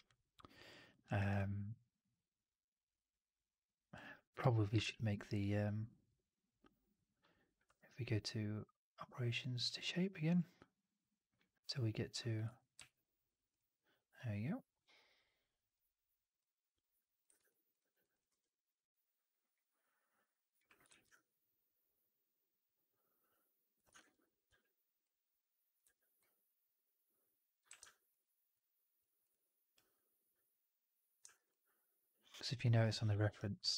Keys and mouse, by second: 0.8 alt+drag, 1.1 alt+right drag, 1.2-3.8 alt+drag, 4.7 shift+Tab, 7.5 q, 17.3 alt+f, 17.4 alt+click, 17.7 alt+right click, 17.9 alt+drag, 18.2 r, 20.1 middle click, 20.8 shift+x, 21.0-23.6 alt+drag, 23.8 shift+x, 24.4 w, 25.7 r, 27.6 w, 31.2 alt+right click, 31.4 alt+click.